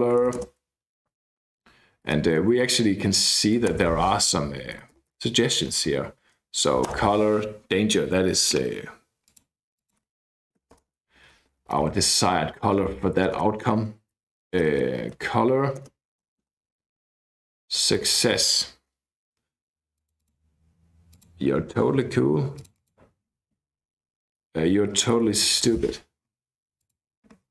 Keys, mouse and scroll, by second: 0.2 shift+;, 0.4 shift+space, 1.5 ', 2.0 BackSpace, 3.3 shift+', 3.8 ctrl+space, 4.8 Down, 4.9 Down, 5.1 Down, 5.3 Down, 5.6 Up, 5.8 Up, 6.9 Return, 9.3-10.1 scroll up 1, 10.6-13.3 typing, 10.8 Return, 14.6-18.8 typing, 15.8 Return, 19.1 Right, 20.0 click, 21.1 click, 22.6 click, 24.8-26.1 typing, 26.8 click.